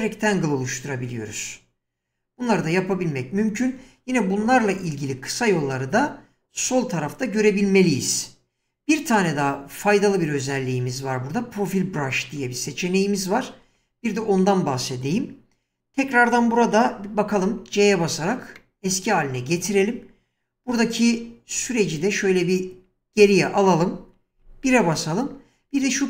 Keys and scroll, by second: 12.3 space, 17.3 c, 21.6 ctrl+z, 24.3 1.